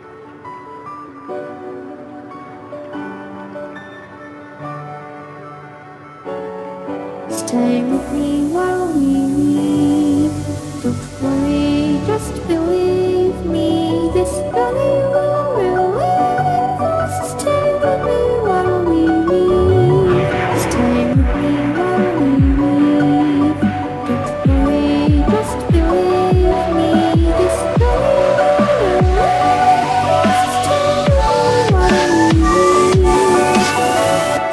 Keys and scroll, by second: 5.8 ctrl+t, 9.8 Return, 10.5 Return, 17.2 Return, 20.4 Return.